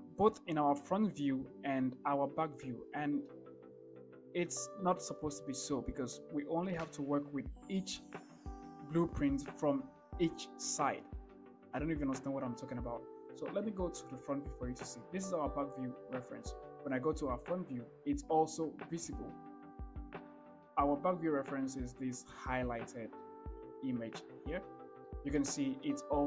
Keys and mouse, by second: 17.3 KP_1, 20.8 shift+middle click, 21.0 middle click, 25.3-26.2 shift+middle drag.